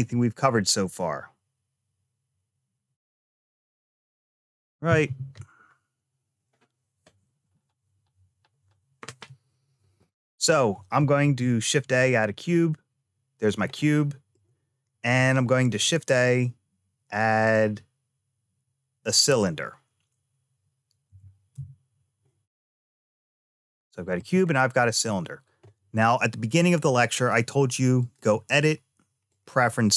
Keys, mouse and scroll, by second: 11.0 shift+a, 13.6 shift+middle click, 15.5 shift+a, 20.9 g, 23.3 middle click, 24.4 shift+middle click, 27.8-29.5 drag.